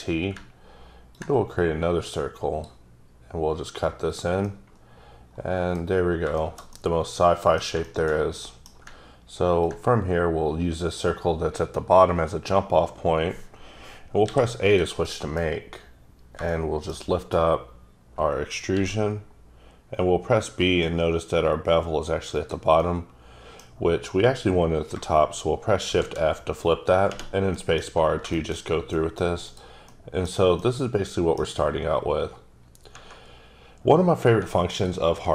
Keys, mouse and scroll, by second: 4.4-5.9 middle drag, 5.9 scroll up 3, 6.3 middle click, 6.7 double middle click, 7.8 shift+middle click, 9.6 ctrl+click, 14.2 a, 15.0 middle click, 17.1 double middle click, 18.7 b, 22.3 click, 22.7 middle click, 25.8 shift+f, 27.5 middle click, 28.3 double middle click, 28.6 scroll down 1, 28.9 middle click, 29.8 middle click, 30.5 middle click, 31.6 scroll up 2, 33.7 scroll up 1, 34.7 alt+click.